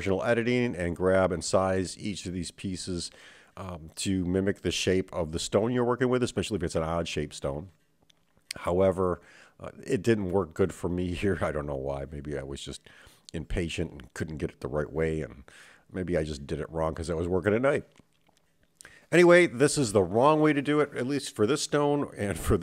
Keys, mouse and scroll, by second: 0.7 KP_7, 2.4 s, 6.7 middle click, 7.4 scroll up 1, 8.5 click, 10.8 shift+click, 12.3 s, 16.2 KP_7, 18.7 middle click, 21.7 click, 22.4 middle click.